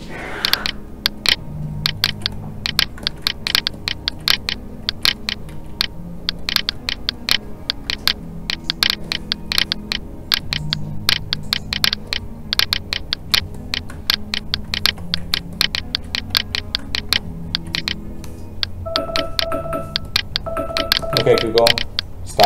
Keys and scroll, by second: 5.4 alt+a.